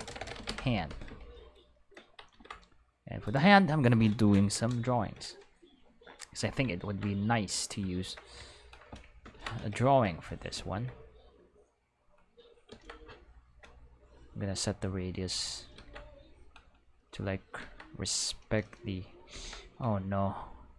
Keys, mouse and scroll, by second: 0.0-0.3 typing, 0.5 Return, 2.0 middle click, 2.3 ctrl+s, 3.3 click, 9.3 ctrl+space, 10.1 q, 11.7 click, 12.7 ctrl+z, 14.0 click, 14.9 click, 15.8 ctrl+z, 16.5 click, 17.6 ctrl+z, 17.9 click, 19.3 ctrl+z, 20.2 click.